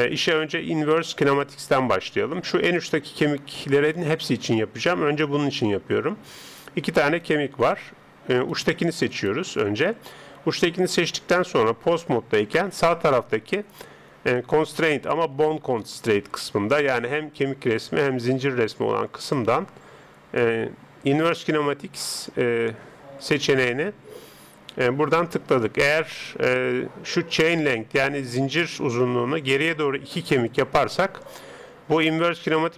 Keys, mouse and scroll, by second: 3.0 right click, 14.4 click, 30.2 click.